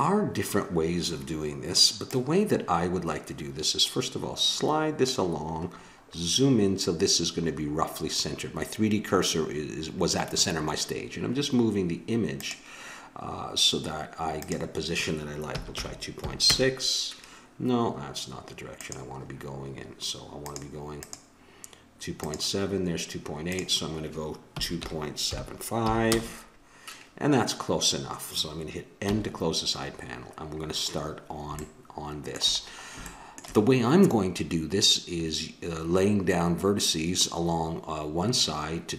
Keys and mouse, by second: 2.0-3.8 drag, 5.6 middle click, 6.2 click, 6.2 middle click, 12.4-16.5 drag, 18.8-21.1 drag, 21.1-22.3 right drag, 22.3-26.0 drag, 29.0 n, 30.1 middle click.